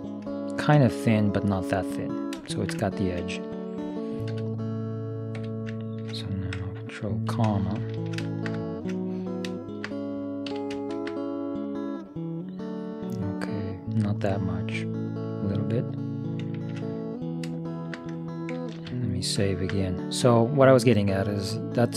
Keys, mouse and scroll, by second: 4.3 e, 5.9-7.9 middle drag, 7.5 ctrl+,, 8.1-10.3 middle drag, 10.6 s, 16.7-19.3 middle drag, 18.8 ctrl+s, 19.7-21.7 middle drag.